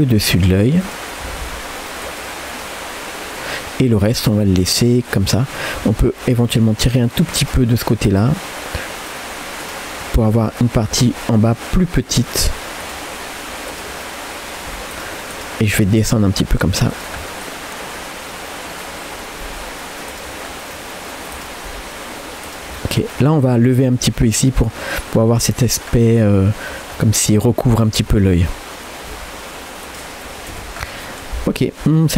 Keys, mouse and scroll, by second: 0.8 click, 1.2 g, 2.5 middle click, 5.1 click, 5.8 g, 9.6 click, 10.2 click, 10.8 g, 12.8 click, 13.7 click, 14.0 middle click, 14.9 shift+click, 15.9 g, 17.2-19.4 middle drag, 19.4 r, 20.5 scroll down 1, 20.7 middle click, 21.4 click, 21.7 g, 22.8 middle click, 23.2 scroll down 1, 23.5 middle click, 23.8 scroll down 1, 24.1 g, 24.7 middle click, 24.9-25.6 scroll down 1, 25.6-26.0 scroll down 1, 26.2 middle click, 26.7 scroll up 2, 27.0 middle click, 27.5 middle click, 28.2 click, 28.5 middle click, 29.1 g, 30.3-30.9 scroll down 2, 30.6 Tab, 31.0-32.1 middle drag.